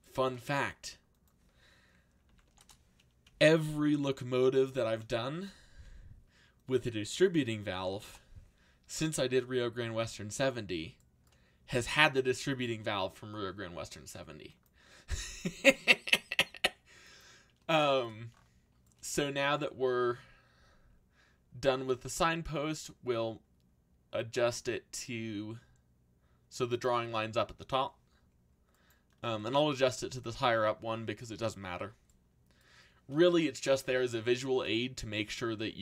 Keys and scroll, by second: 2.0-3.9 typing, 7.7 7, 8.0 Return, 12.3 a, 21.6-22.5 typing, 27.4 z.